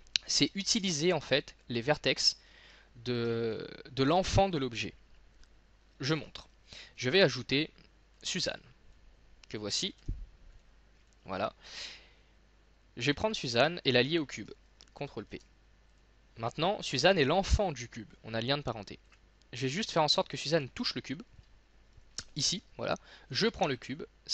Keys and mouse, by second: 6.1 shift+a, 10.0 s, 15.3 ctrl+shift+p, 18.5 right click, 18.9 right click, 21.5-22.7 middle drag, 23.4 right click.